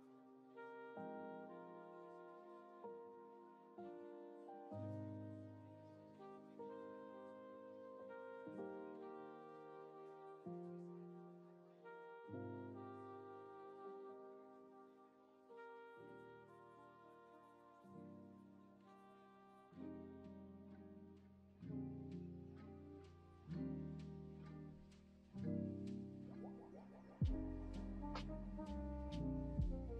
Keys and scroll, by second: 14.3 F2, 21.4 v, 22.9 alt+Home, 26.9 ctrl+r, 29.6 ctrl+c.